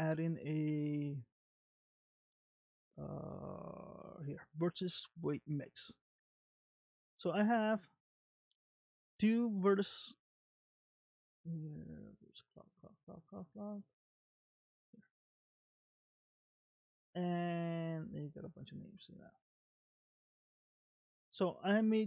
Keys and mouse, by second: 8.1 click, 10.8 click, 14.1 click, 17.3-19.4 drag, 21.1 click.